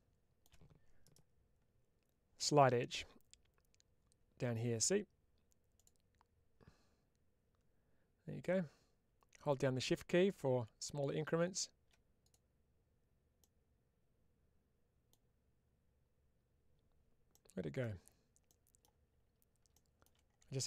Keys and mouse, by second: 2.3-13.5 right drag, 17.2 middle click, 18.3 middle click, 20.5 shift+middle click.